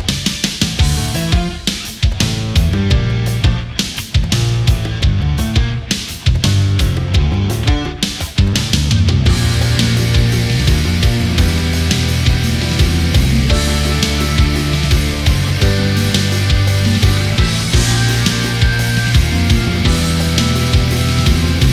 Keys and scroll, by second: 11.9 Delete, 15.3 ctrl+=, 18.1 Delete, 18.7 ctrl+z, 21.1 Delete.